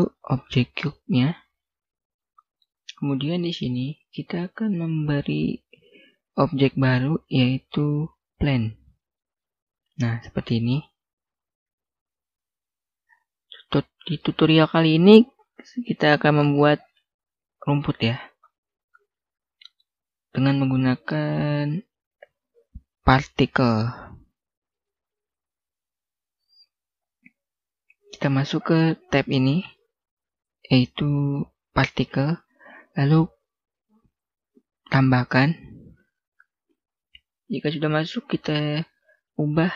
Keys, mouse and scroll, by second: 1.3 click, 2.1 middle click, 4.6 click, 8.3 click, 8.8-9.3 scroll up 1, 9.3-9.8 scroll down 1, 9.8 middle click, 11.2-12.1 scroll down 1, 12.1 s, 12.9 click, 13.2 middle click, 18.6 scroll down 1, 18.8 middle click, 19.9-21.4 scroll up 1, 21.5 click, 35.4 click.